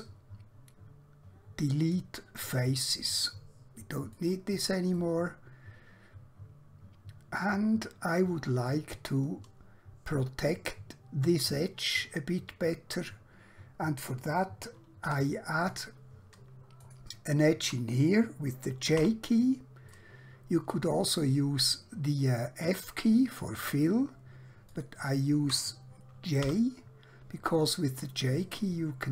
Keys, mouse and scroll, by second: 1.8 click, 5.0 middle click, 15.0 1, 15.6 click, 16.9 shift+click, 19.0 j, 20.0 middle click, 23.6 click, 24.8 shift+click, 26.4 j.